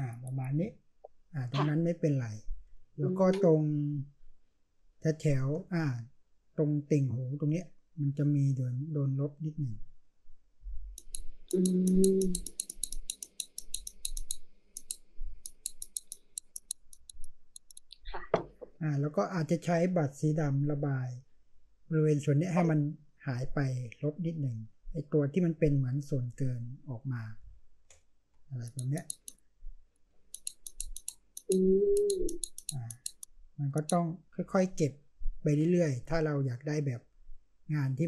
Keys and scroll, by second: 2.7-5.5 space, 27.4 space, 28.8 space, 29.3-31.0 space, 34.3-38.0 space.